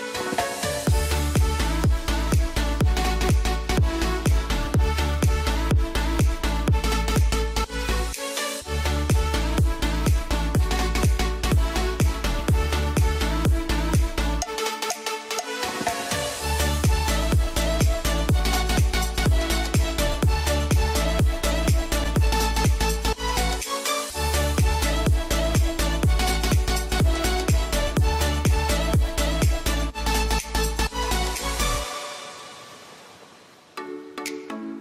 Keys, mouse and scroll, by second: 7.3 space, 8.0 ctrl+k, 9.0 click, 10.2 ctrl+r, 10.9 click, 11.9 ctrl+z, 12.4 F3, 13.4-15.3 alt+drag, 15.3-16.9 drag, 16.9 ctrl+g, 17.3 click, 19.0 F2, 19.2-32.4 drag, 32.6 g, 33.4-34.8 drag.